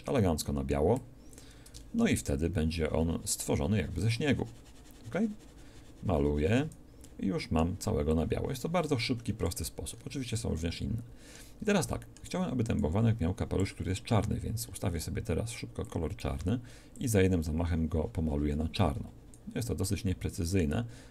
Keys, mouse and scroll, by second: 7.0 middle click, 8.2-9.9 drag, 15.8-17.1 drag, 19.8 middle click.